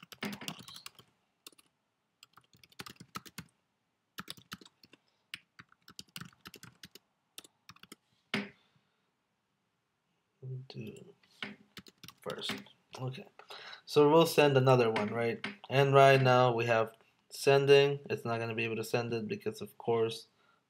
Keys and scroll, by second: 0.3-1.2 space, 1.5 BackSpace, 1.6 BackSpace, 2.8 space, 4.2 space, 4.5 space, 5.9-7.8 typing, 12.0 space.